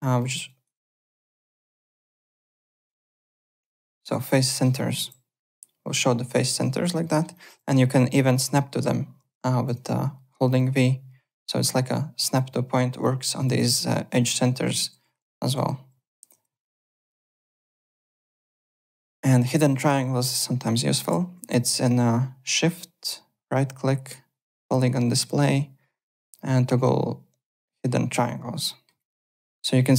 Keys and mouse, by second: 0.2 alt+middle click, 0.4 alt+right click, 0.8 click, 1.7 7, 2.5 7, 2.8 8, 3.6 8, 4.5 alt+middle click, 4.7 alt+click, 5.7 8, 7.0 alt+middle click, 7.3 alt+click, 8.0 v, 8.1 click, 9.6 v, 10.8 v, 11.3 click, 12.2 v, 13.0 click, 13.0 v, 14.2-15.2 typing, 15.3 click, 16.6 alt+middle click, 16.7 alt+right click, 17.0 alt+Tab, 18.9 alt+Tab, 19.7 shift+right click, 21.6 shift+right click, 28.7 alt+middle click, 29.0 alt+click.